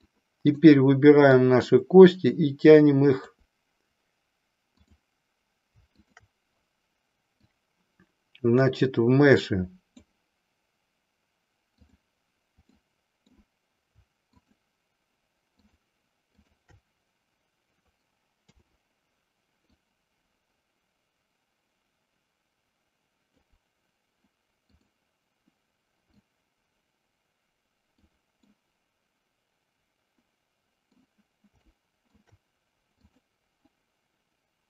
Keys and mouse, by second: 0.1 click, 1.4-3.3 drag, 4.8 click, 7.4-9.9 drag, 11.8 click, 12.8 middle click, 14.3 shift+click, 16.4 shift+click, 18.4 KP_7, 19.7-23.4 drag, 24.7 click, 26.2-28.1 drag, 28.6-31.2 middle drag, 31.7 shift+middle click, 33.1 click.